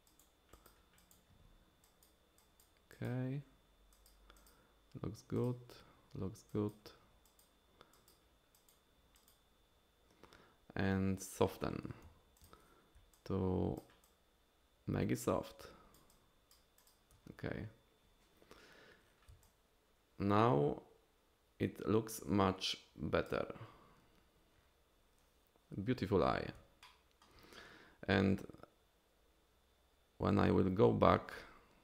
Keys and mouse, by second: 0.1 click, 0.5 click, 1.0 click, 1.8 click, 2.4 click, 2.9 click, 3.9 click, 4.4 click, 5.4 click, 6.5 click, 7.3 click, 7.9 click, 8.5 click, 9.2 click, 11.2 click, 12.1 f, 13.1 shift+click, 14.0-16.0 shift+drag, 16.1 shift+click, 16.8 shift+click, 19.4-23.3 shift+drag, 26.8 shift+click.